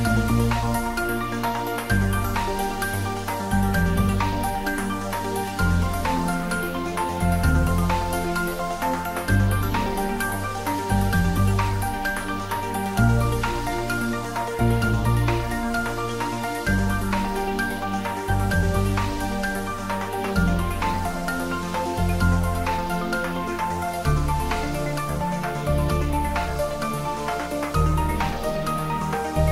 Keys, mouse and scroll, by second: 0.5-1.3 typing, 0.9 click, 1.5 ctrl+middle click, 2.0 shift+middle click, 2.6 2, 3.5 shift+click, 4.5 g, 5.2 x, 5.9 y, 7.3 click, 7.4 Tab, 8.0 click, 10.0-11.3 middle drag, 11.3-12.5 ctrl+middle drag, 12.5 ctrl+middle click, 12.8 middle click, 13.9 ctrl+middle click, 14.1 middle click, 15.2 ctrl+z, 18.8-21.0 ctrl+middle drag, 21.0 ctrl+middle click, 21.8 middle click, 22.5 Tab, 23.1 ctrl+middle click, 24.0 shift+click, 26.9 3, 27.3 shift+click.